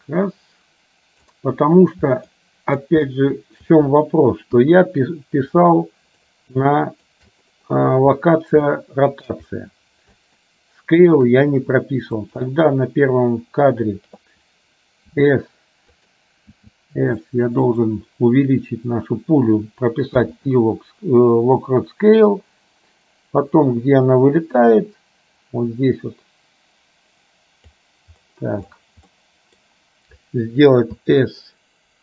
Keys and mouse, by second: 2.5 middle click, 3.2 shift+middle click, 4.7 KP_1, 5.7 shift+middle click, 6.7 shift+middle click, 8.8 shift+middle click, 10.5 shift+middle click, 12.5 click, 15.2 s, 16.6 s, 22.5-27.8 drag, 29.2 middle click, 31.1 s.